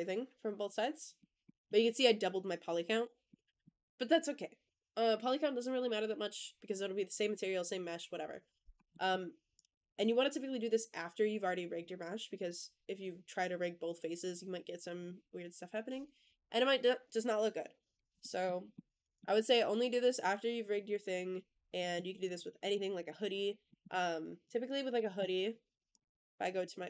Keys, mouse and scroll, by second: 1.2 scroll down 1, 1.3 middle drag, 3.1-3.5 middle drag, 8.8 middle drag, 9.4 click, 9.8 click, 18.1 middle drag, 18.6-19.1 middle drag, 19.3-19.7 middle drag, 21.6 middle drag, 22.1 click, 22.5 click, 22.9 click, 23.6 middle drag, 24.8 x.